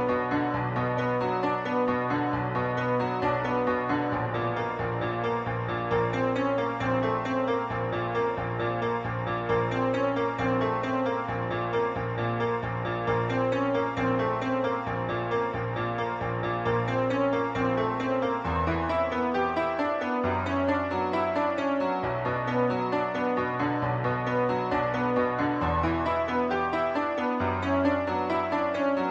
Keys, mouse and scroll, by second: 0.8-1.1 typing, 1.2 click, 3.1-3.6 typing, 8.5 click, 8.8-9.3 scroll, 9.1 middle click, 10.2 7, 10.9 scroll up 2, 11.1 a, 12.1 b, 12.2 click, 13.5-13.9 typing, 17.1 click, 17.6 middle click, 18.4 Tab, 18.5 Tab, 19.0 Tab, 19.4 middle click, 20.9-21.2 typing, 24.5 click, 25.4 shift+click, 26.3-28.2 typing.